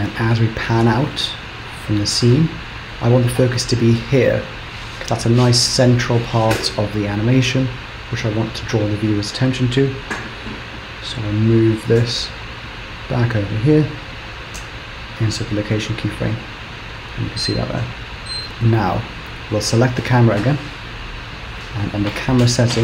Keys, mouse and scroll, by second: 0.1 click, 9.9 g, 11.8 g, 14.6 i, 16.2 Right, 16.7 Right, 17.0 Right, 17.3 Right, 17.5 Right, 20.0 click.